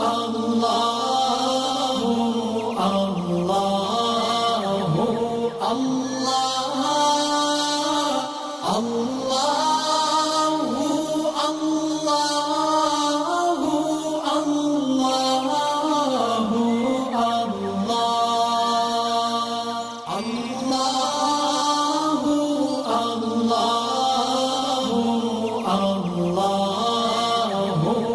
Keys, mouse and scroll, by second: 0.1 alt+scroll up 1, 0.8 click, 8.1 alt+scroll down 1, 8.6 alt+scroll up 1, 9.1-14.9 drag, 15.7 alt+scroll down 1, 16.3 alt+scroll up 1, 16.7 click, 23.3 alt+scroll down 1, 23.6 click, 23.9 alt+scroll down 1, 24.5 click, 24.9 alt+scroll up 1, 25.5 click, 26.0 shift+click.